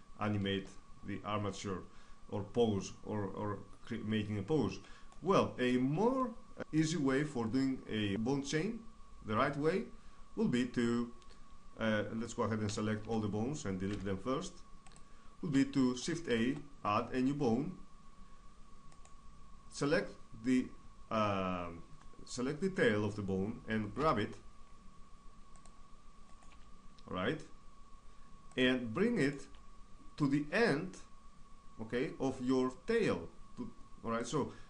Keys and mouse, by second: 0.1 Tab, 0.6-1.9 middle drag, 3.2 middle click, 8.1-9.8 middle drag, 12.3 a, 12.6 a, 13.5 x, 15.9 shift+a, 18.5 right click, 19.1 click, 19.4 right click, 23.6 g, 25.2-26.9 drag, 25.9 right click, 26.1 g, 28.2 click, 28.8 middle click, 29.0 g, 29.8 click, 30.4 right click, 33.9-34.6 drag.